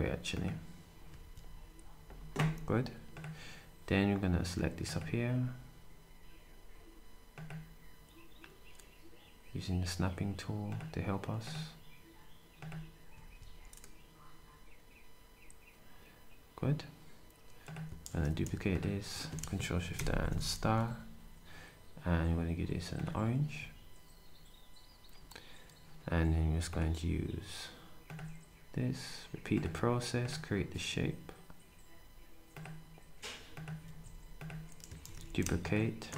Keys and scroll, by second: 1.1 s, 13.1 shift+s, 20.0 8, 20.7 d, 23.5 s, 33.8 s, 35.1 d.